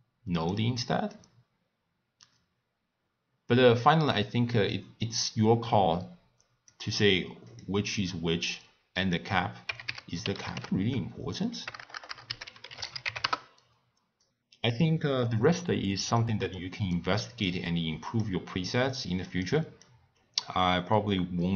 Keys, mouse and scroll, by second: 7.0 click, 7.8 click, 9.0-11.8 drag, 11.8 BackSpace, 11.9 BackSpace, 14.2 click, 15.7 click, 16.5-17.4 middle drag, 17.4 click, 18.6 click, 19.3-21.5 drag.